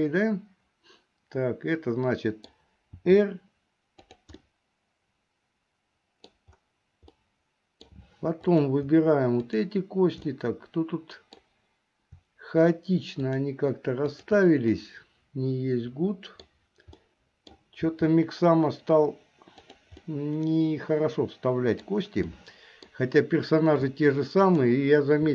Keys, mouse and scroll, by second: 3.1 r, 4.6-6.5 middle drag, 7.3 middle click, 8.7 click, 9.6 shift+click, 10.4-11.6 middle drag, 13.3 shift+click, 14.2 shift+click, 14.8-16.7 middle drag, 17.1 middle click, 18.0 r, 20.1-22.0 middle drag, 22.5 middle click, 24.5 click.